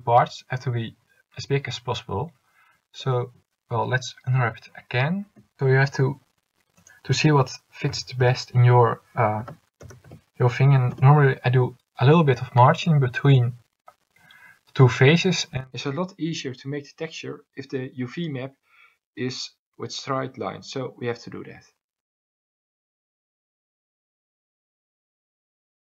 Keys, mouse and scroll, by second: 5.4 u.